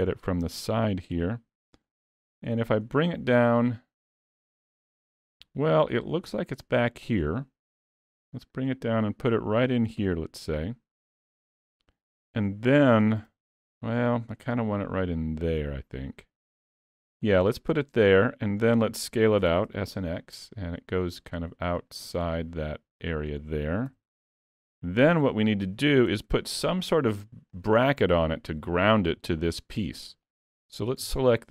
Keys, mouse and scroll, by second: 0.1 shift+middle click, 1.0 s, 2.3 g, 7.9 s, 10.0 g, 13.3 alt+a, 13.6 click, 14.5 click, 17.5 middle click, 19.5 s, 22.4 middle click, 23.9 s, 26.1 s, 27.9 middle click, 29.2 middle click, 30.3 click, 31.1 Tab, 31.4 middle click.